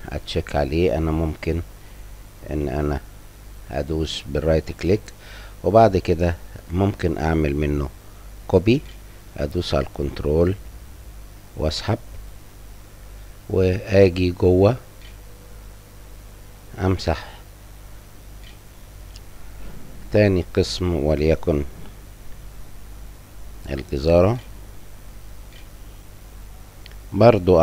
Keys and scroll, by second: 8.5-10.3 typing, 11.7 w, 16.6 j, 17.7 s, 18.7 Delete, 19.6 Delete, 20.2 BackSpace, 22.3-24.0 typing.